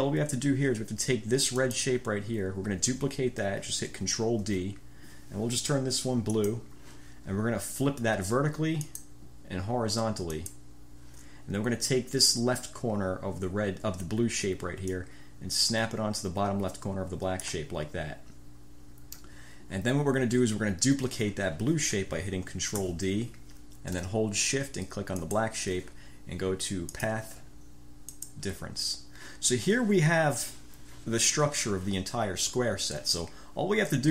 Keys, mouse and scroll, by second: 1.7 click, 4.5 ctrl+d, 6.5 click, 6.7 scroll up 1, 9.0-9.4 scroll up 1, 10.5 click, 15.1-17.8 drag, 22.9 ctrl+d, 25.4 shift+click, 27.1 click, 28.2 click.